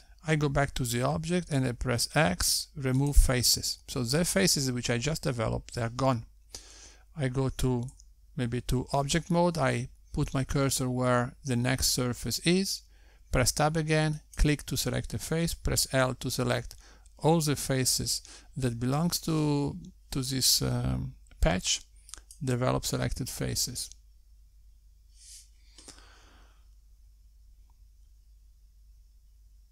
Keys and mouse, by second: 1.4 x, 7.4 Tab, 12.8 Tab, 13.9 click, 15.0 l, 17.2 `, 21.8 click.